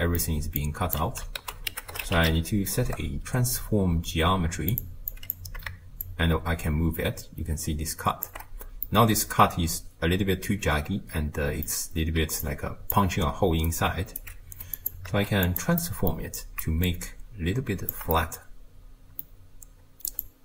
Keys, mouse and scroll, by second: 0.6 click, 1.4 ctrl+a, 5.1 click, 6.0-8.8 shift+drag, 8.8-12.0 middle drag, 12.2 d, 12.4-12.9 drag, 12.9-13.5 d, 13.7 right click, 14.2 d, 14.8 click, 15.1 shift+d, 15.8-16.9 middle drag, 16.9-18.1 shift+drag, 18.1-20.1 middle drag, 20.1-20.4 drag.